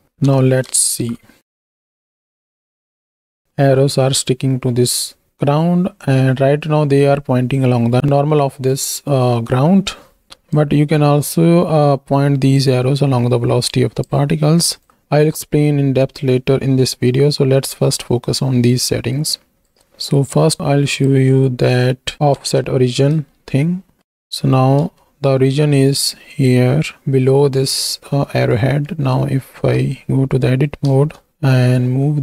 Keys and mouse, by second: 0.0 middle click, 0.2 KP_1, 1.0 shift+Right, 1.2 shift+Left, 1.5 space, 2.0 alt+a, 3.3 space, 3.8 shift+click, 8.4 click, 10.5-14.1 drag, 14.8-19.7 drag, 20.9 click, 21.8-22.1 shift+middle drag, 22.1 KP_1, 22.4 ctrl+space, 23.2-24.0 shift+middle drag, 28.8 shift+drag, 30.0 Tab, 30.9 a, 31.3 g, 31.8 z.